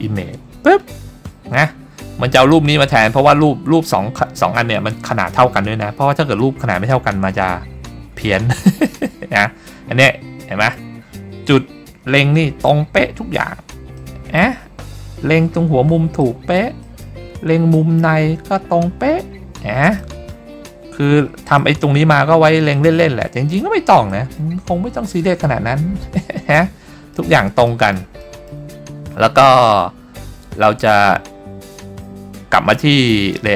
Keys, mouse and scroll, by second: 9.6-10.0 scroll up 2, 10.5 middle click, 12.4 middle click, 14.1 middle click, 16.4 middle click, 17.0-17.3 middle drag, 17.4-17.7 scroll up 2, 17.8 middle click, 19.4-19.9 scroll down 3, 20.1 middle click, 21.0-21.5 scroll up 3, 21.7-22.1 middle drag, 22.3 scroll down 1, 22.8 middle click, 23.5-23.8 scroll up 2, 24.2 middle click, 24.8-25.2 scroll up 3, 26.1-27.0 scroll down 6, 27.2 middle click, 27.8 middle click, 28.3 middle click.